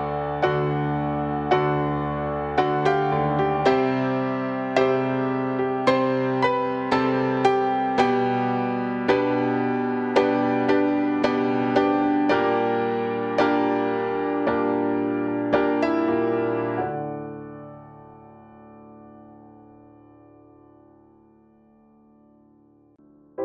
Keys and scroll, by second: 20.9 ctrl+u.